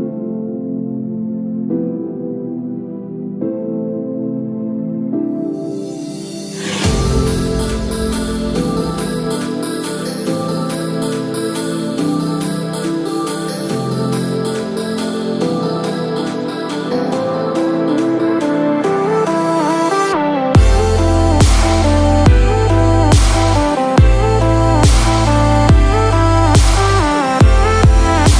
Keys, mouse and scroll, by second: 2.2 click, 5.2 click, 6.5 scroll down 1, 7.0 scroll down 2, 7.1-8.1 scroll up 5, 8.1 middle click, 11.3 scroll down 3, 11.9 middle click.